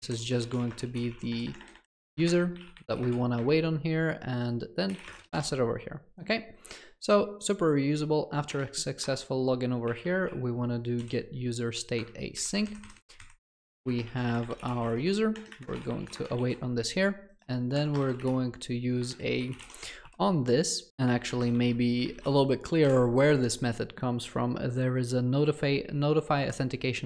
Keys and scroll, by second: 12.0 Return, 20.3 ctrl+BackSpace, 21.2 ctrl+BackSpace.